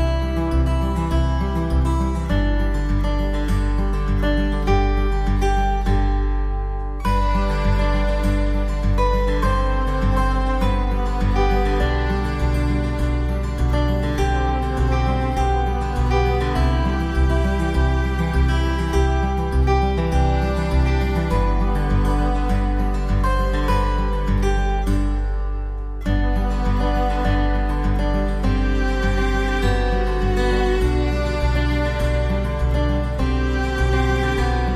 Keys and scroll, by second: 2.2 ctrl+=, 15.1 ctrl+-, 19.7 ctrl+c, 19.9 ctrl+v, 31.1 ctrl+[, 33.8 ctrl+BackSpace.